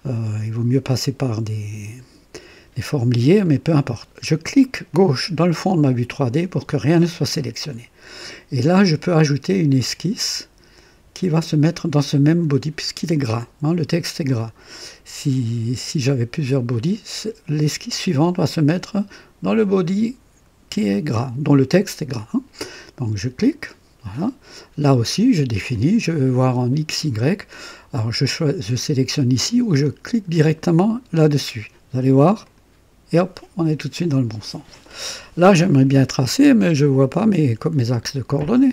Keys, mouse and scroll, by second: 3.4 click, 4.9 click, 23.4 click, 25.7-26.5 drag, 32.4 click.